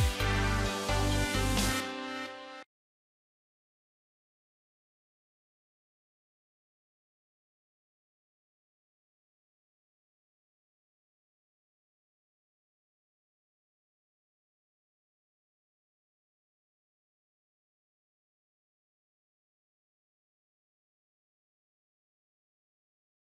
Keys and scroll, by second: 2.0 alt+w.